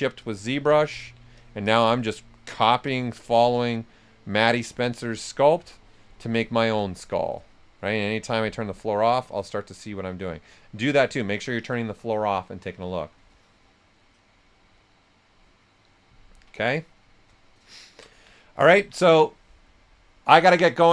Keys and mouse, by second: 0.9-1.8 typing, 2.0 click, 2.3 alt+click, 5.0 alt+click, 5.7 shift+click, 6.8 ctrl+shift+right click, 6.9-7.6 typing, 7.1 right click, 8.3 click, 8.7 right click, 16.5 right click, 16.5 typing, 17.7 ctrl+right click, 18.3 right click, 20.6 typing.